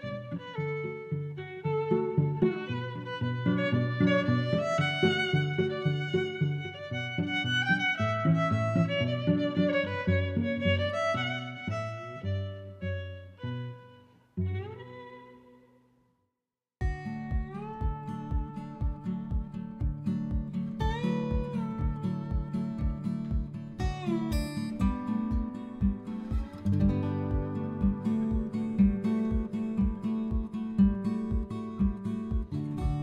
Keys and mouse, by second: 1.1 a, 1.6 click, 2.0 a, 5.8 b, 8.6 click, 9.4 click, 10.2 click, 10.4 click, 12.9 Tab, 13.9 click, 14.9 click, 15.3 click, 15.5 middle click, 19.5 Tab, 22.8 middle click, 24.3 click, 24.9 middle click, 25.7 middle click, 26.9 click, 27.6 middle click, 28.0 middle click, 29.7 click, 30.8 click, 31.6 d, 32.8 y.